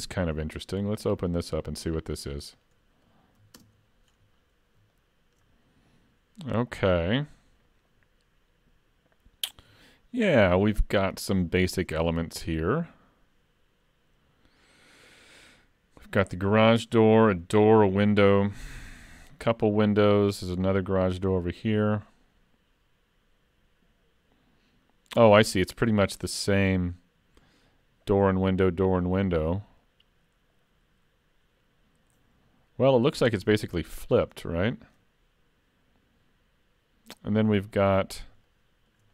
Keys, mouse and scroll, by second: 1.4 click, 2.6 click.